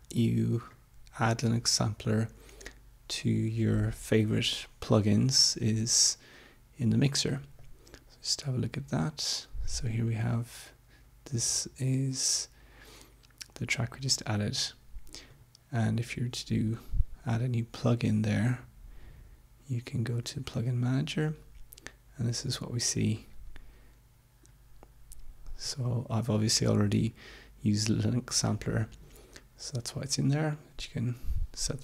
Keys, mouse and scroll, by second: 7.7 click, 15.2 right click, 20.2 click, 23.2-23.8 scroll down 2, 24.1-24.6 scroll up 2, 25.8-26.4 scroll down 2.